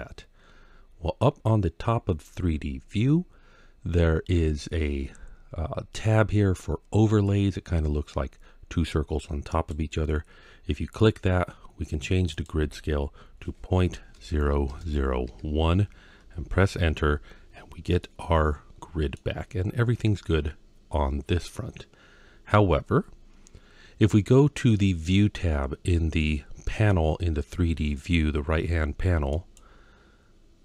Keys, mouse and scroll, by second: 9.3-17.0 drag, 17.8-19.0 middle drag, 29.2 click.